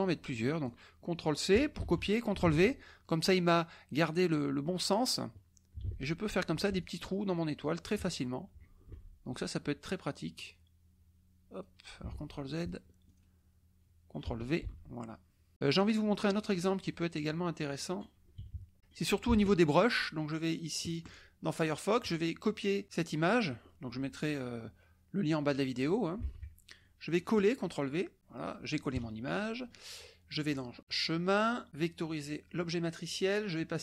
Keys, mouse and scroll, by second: 1.7 ctrl+c, 2.4 ctrl+v, 3.8-5.1 drag, 5.8 ctrl+v, 6.8-8.0 ctrl+shift+drag, 8.9 ctrl+v, 10.3-11.8 drag, 12.1 ctrl+z, 13.1 ctrl+click, 14.6 ctrl+v, 15.9 click, 16.9 click, 18.4 KP_Subtract, 18.7 click, 19.3 alt+Tab, 20.9 alt+click, 22.0 right click, 22.8 click, 26.2 alt+Tab, 26.8 alt+click, 28.9 KP_Subtract, 29.4 click, 30.5 click, 32.0 click.